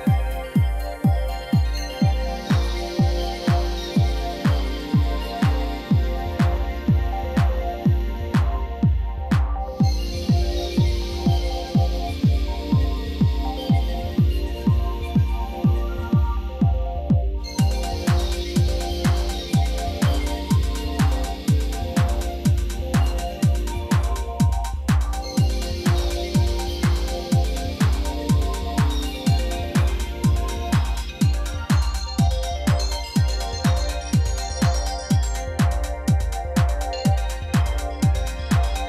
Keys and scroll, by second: 1.4 4, 1.6 Return, 4.0 0, 4.1 Return, 11.8 Tab, 12.7 2, 13.7 s, 18.8 Tab, 19.9 ctrl+2, 21.8 g, 22.0 shift+z, 24.7-26.7 typing, 29.7 shift+d, 29.8 x, 31.7 r, 33.3 g, 33.5 shift+z, 36.9 shift+d, 37.9 x.